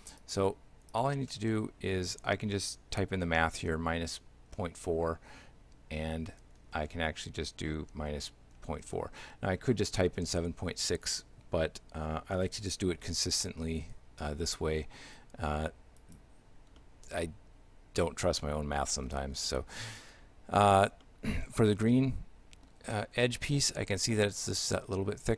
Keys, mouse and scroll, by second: 0.2 click, 16.0 right click, 16.8 shift+middle click, 19.4-19.7 scroll up 3, 21.1 shift+middle click, 23.7 shift+middle click.